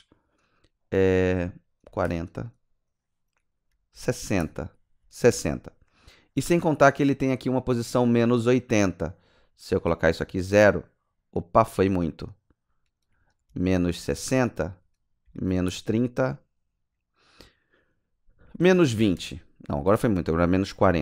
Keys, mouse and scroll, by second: 1.8 KP_4, 2.1 KP_0, 3.9 BackSpace, 4.1 BackSpace, 4.2 KP_6, 5.3 Return, 7.5 click, 10.2 KP_0, 13.4 BackSpace, 13.7 KP_Subtract, 14.0 KP_6, 15.2 BackSpace, 15.4 BackSpace, 15.5 KP_3, 15.7 KP_0, 18.4 BackSpace, 18.6 BackSpace, 18.7 KP_2, 19.0 KP_0, 19.2 KP_Enter, 20.7 click, 20.9 BackSpace.